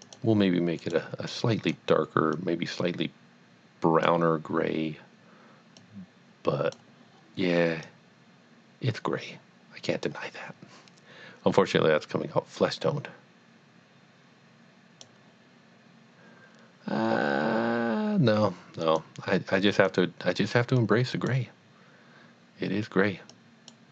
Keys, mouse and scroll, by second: 0.0 click, 0.8 click, 1.3 click, 2.3 click, 6.1 click, 7.9 click, 9.4 click, 11.6 click, 18.9 click, 20.8 click, 21.1 click, 23.3 click.